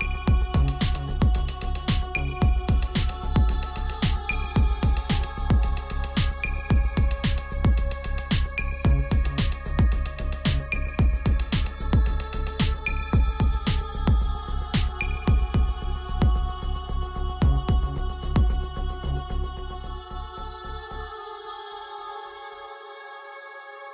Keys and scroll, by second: 9.6 ctrl+z, 10.4 ctrl+z.